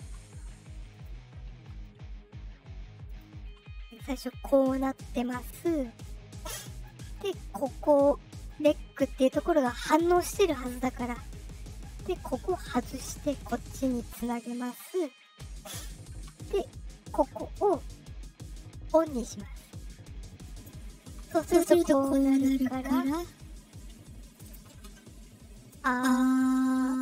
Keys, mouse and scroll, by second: 0.8 click, 3.0 click, 4.1 click, 4.8 click, 5.9 click, 6.7 click, 7.1 click, 8.3 click, 12.4 click, 14.1 click, 15.7 click, 17.4 click, 20.2 click, 24.1 click, 25.4-27.0 drag.